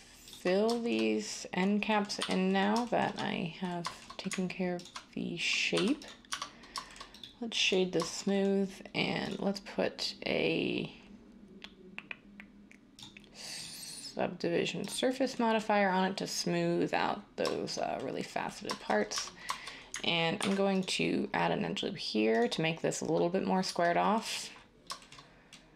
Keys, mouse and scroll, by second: 2.2 f, 5.7-6.3 typing, 19.1 Tab, 20.4 ctrl+r, 23.6 Tab.